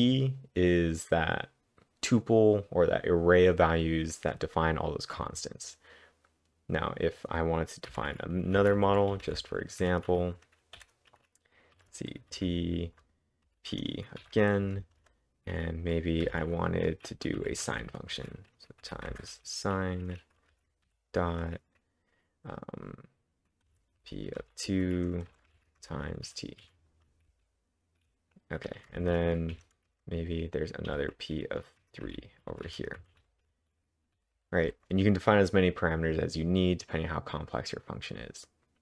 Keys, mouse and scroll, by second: 7.9 click, 8.4-11.8 typing, 12.9-15.3 typing, 16.3-21.4 typing, 23.3-27.3 typing, 28.5-34.7 typing.